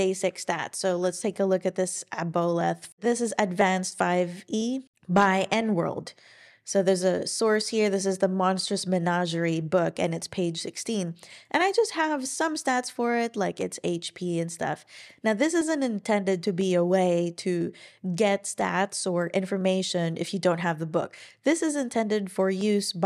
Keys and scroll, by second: 0.9 ctrl+super+l.